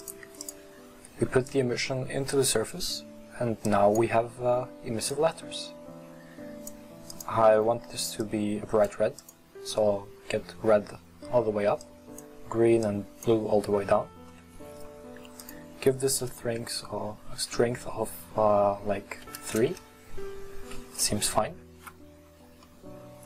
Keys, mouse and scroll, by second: 2.5 click, 5.2-8.2 drag, 19.6-20.5 drag, 20.8 scroll up 1, 21.0 middle click, 21.4 scroll down 1.